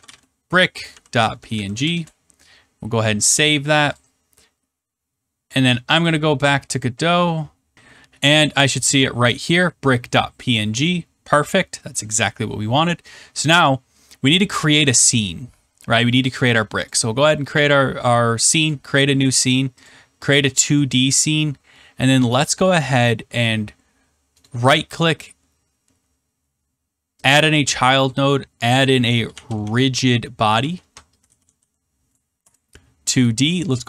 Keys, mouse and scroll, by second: 0.0-2.0 typing, 3.9 click, 6.0 click, 8.6 click, 10.8-11.3 scroll, 16.8 click, 18.6 click, 20.4-21.8 scroll, 22.5-22.8 scroll, 24.4 right click, 27.3 click, 29.0-32.0 typing, 32.3 Return, 33.2 right click.